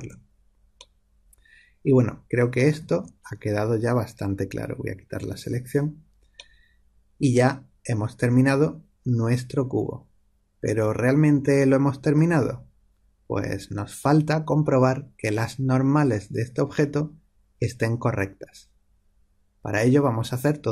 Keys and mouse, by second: 1.0-4.8 middle drag, 5.1 a.